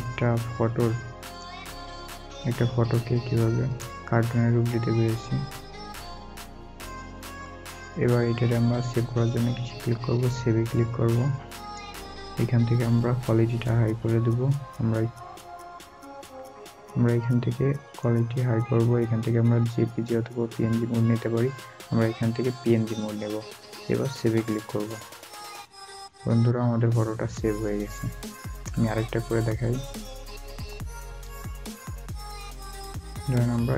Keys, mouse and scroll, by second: 0.4-0.9 scroll up 1, 2.2 scroll down 1, 5.8 scroll down 1, 6.0-7.1 scroll up 1, 9.8 scroll down 1, 28.9 scroll down 1, 29.0 scroll up 1.